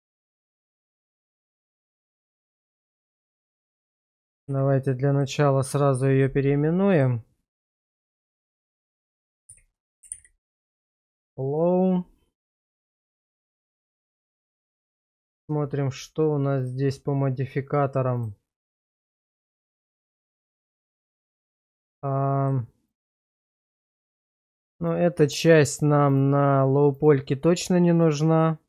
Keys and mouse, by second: 3.0-3.8 middle drag, 4.4 shift+r, 7.8-8.9 typing, 13.0 /, 14.4 middle drag, 15.1 shift+middle click, 18.1 click, 22.4 click, 22.9 click, 23.4 click, 24.0 click, 24.8 click, 25.4 click, 26.1 click, 27.0 click, 28.0 click.